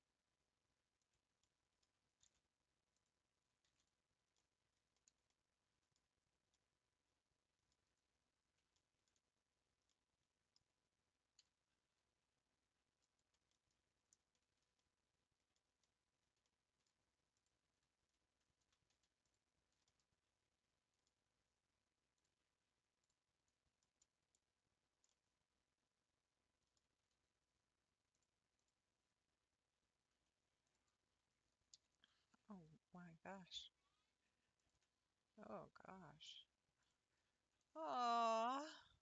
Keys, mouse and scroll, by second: 1.4-3.0 middle drag, 3.0 ctrl+v, 3.8 ctrl+v, 4.4-5.9 middle drag, 5.9-6.5 scroll down 1, 6.5-8.3 middle drag, 8.3-8.8 scroll up 1, 8.8 shift+middle click, 9.1-9.9 scroll up 3, 9.9-11.4 middle drag, 11.4 e, 13.5-17.4 middle drag, 18.6 1, 19.8-21.2 middle drag, 21.2 scroll up 1, 23.1 click, 23.5-24.0 scroll down 3, 24.0 middle click, 24.6-25.1 scroll down 2, 25.1-27.0 middle drag, 27.0 a, 28.7-30.7 drag, 31.7 l, 32.4 r, 36.9 Left, 38.5 r.